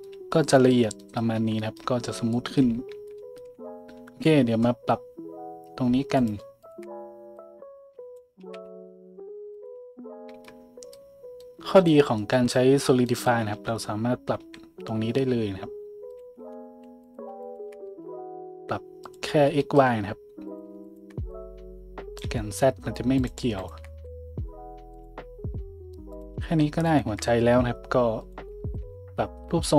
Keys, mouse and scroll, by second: 1.3 z, 2.9 Tab, 4.0 `, 6.1 middle click, 6.1 right click, 6.6 shift+middle click, 6.6 shift+right click, 8.4 s, 9.7-17.0 middle drag, 10.3 Tab, 13.6 Tab, 14.4 s, 16.4 `, 17.0 click, 17.1 shift+middle click, 17.4 shift+click, 17.5-20.5 shift+middle drag, 17.8 s, 20.5 click, 20.6 shift+middle click, 20.8 shift+click, 20.9 shift+middle click, 21.3-25.1 drag, 23.2 middle click, 23.2 right click, 23.6 shift+middle click, 23.6 shift+right click, 23.9 s, 25.1-26.1 middle drag, 26.1 click, 26.2 shift+middle click, 26.8 shift+click, 27.0-29.7 shift+middle drag, 27.4 s, 28.8 Tab.